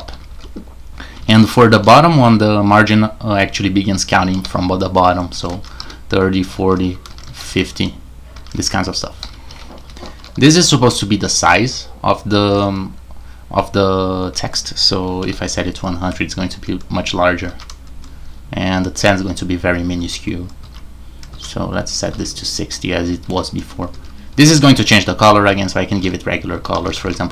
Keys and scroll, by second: 0.0-2.2 typing, 4.3-10.8 typing, 12.5 typing, 15.2-15.5 typing, 17.2-18.0 typing, 19.7-22.1 typing, 23.2-27.3 typing.